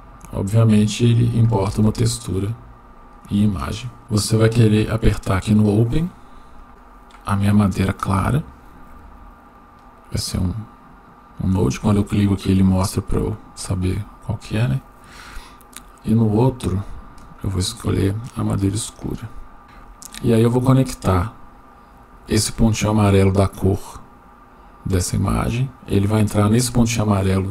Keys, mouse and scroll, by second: 1.9-3.0 shift+middle drag, 6.5 click, 10.3 click, 13.6 click, 14.7-15.0 drag, 19.6 click, 22.7 click, 23.4-27.5 drag.